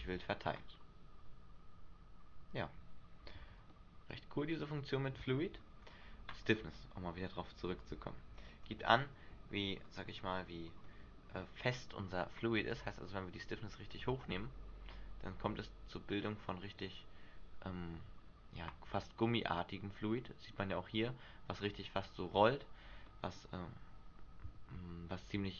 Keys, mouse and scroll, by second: 0.2 alt+a, 3.9 middle click, 5.0 middle click, 5.3 Escape, 6.0-6.6 scroll down 3, 8.0 click, 10.0-11.0 scroll up 4, 11.0 shift+middle click, 12.9 click, 14.2 alt+a, 16.8 middle click, 20.4 middle click, 23.3 middle click.